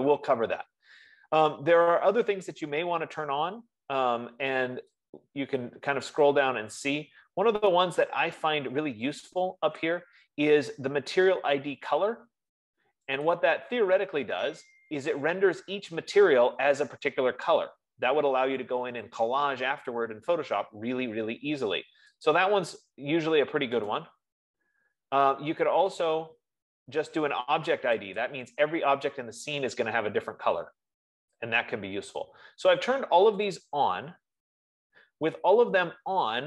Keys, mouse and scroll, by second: 10.1 click, 13.9 click, 23.0 click, 24.4 right click, 25.2 F15, 26.4 right click, 28.6 click.